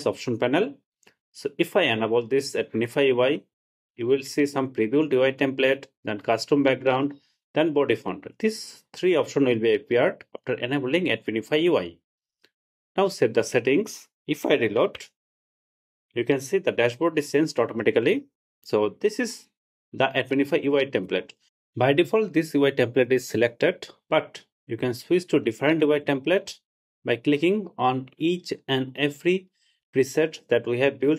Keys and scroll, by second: 15.1 super+r.